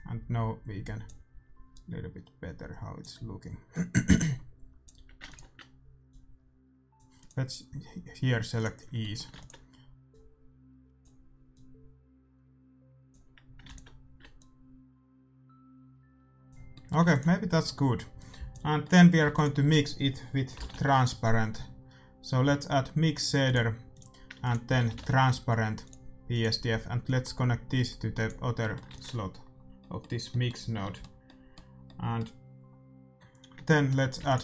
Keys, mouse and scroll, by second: 5.2 ctrl+s, 6.0-8.9 drag, 9.0-12.5 middle drag, 9.3 ctrl+s, 10.0-13.3 drag, 13.6-16.1 drag, 16.7-19.2 middle drag, 17.0 ctrl+s, 18.1-19.9 drag, 19.2 shift+a, 19.9 middle click, 23.9-25.7 drag, 24.3 shift+a, 27.0-28.8 drag, 28.5-32.0 middle drag, 28.8 ctrl+s, 33.6-34.4 middle drag, 34.1 shift+a.